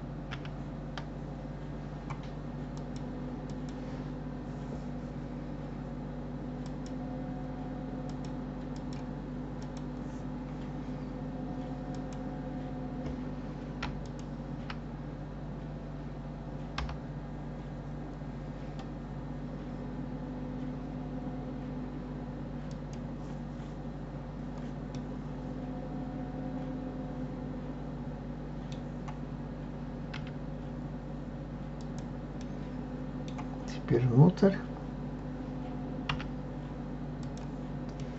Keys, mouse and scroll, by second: 0.3 KP_7, 2.7 click, 3.5 click, 6.6 click, 8.1 click, 8.7 click, 9.7 click, 11.9 click, 14.0 alt+click, 24.9-27.9 middle drag, 32.4-35.4 middle drag, 36.1 e, 38.0-38.1 middle drag.